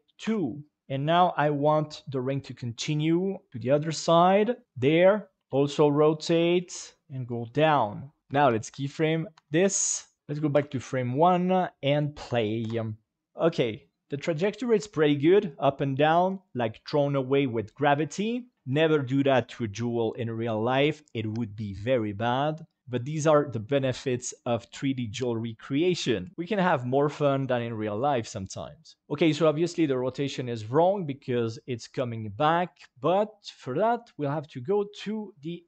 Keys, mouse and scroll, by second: 2.2 g, 4.8 click, 5.4 r, 6.2 r, 6.3 r, 8.2 i, 8.7 i, 9.3 i, 10.2 ctrl+s, 10.2 click, 12.5 space, 13.2-33.7 drag.